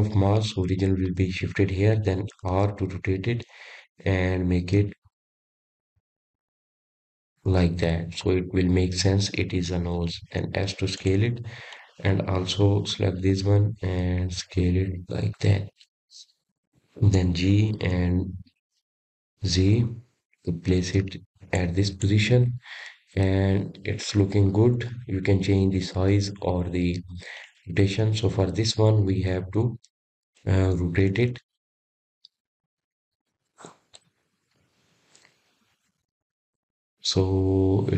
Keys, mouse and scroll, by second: 6.4 r, 12.1-12.7 scroll up 2, 12.7-13.5 scroll down 1, 13.5-14.1 scroll down 1, 14.1 s, 15.7 click, 16.7 s, 20.6 g, 25.9 click, 26.4 scroll up 2, 26.7-27.5 scroll down 4, 27.5-28.5 scroll up 2, 28.5-29.0 scroll down 3, 31.3 click.